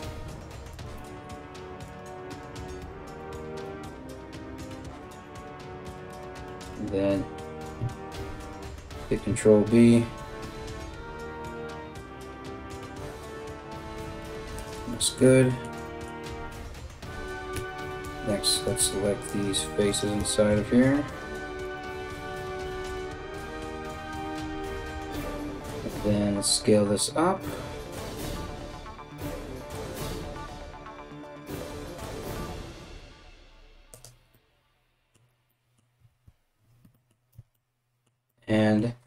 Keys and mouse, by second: 0.3 right click, 1.5 right click, 2.2 alt+shift+right click, 4.6 alt+shift+right click, 4.7-20.7 alt+shift+middle drag, 8.6 ctrl+b, 17.1 3, 17.6 alt+right click, 18.3 alt+shift+right click, 18.9 alt+shift+right click, 19.5 alt+shift+right click, 20.7 alt+shift+right click, 20.8 alt+shift+middle click, 21.2 alt+shift+right click, 21.4 alt+shift+middle click, 22.1 alt+shift+right click, 22.2 shift+middle click, 22.4 alt+shift+right click, 22.7 alt+shift+middle click, 22.8 ctrl+z, 22.9 right click, 23.2-39.0 alt+shift+middle drag, 23.5 alt+shift+right click, 23.7 alt+shift+right click, 23.8 alt+shift+right click, 25.3 alt+s, 35.7 alt+x, 36.9 Tab.